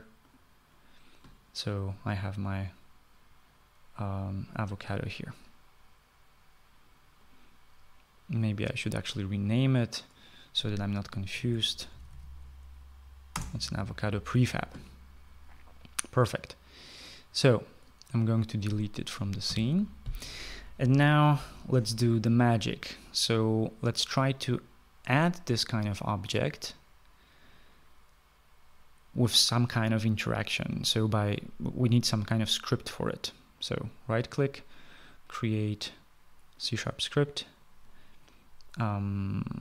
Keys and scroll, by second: 11.5-12.9 typing, 13.6 Return, 19.8 Delete.